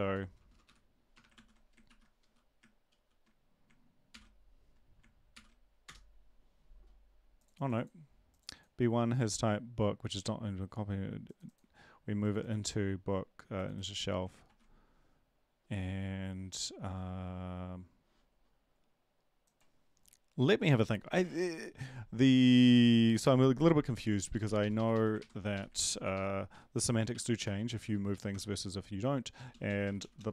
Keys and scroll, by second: 1.3 ctrl+s, 1.3 \, 1.9 ctrl+`, 2.2 Up, 2.9 ctrl+;, 4.1 ctrl+l, 5.3 ctrl+l, 5.8 Return, 14.5 ctrl+`, 25.2 Up, 25.2 ctrl+Right, 25.5 Up, 25.7 ctrl+Left, 25.9 ctrl+Left, 26.5 Right, 26.7-27.8 typing, 28.1 Up.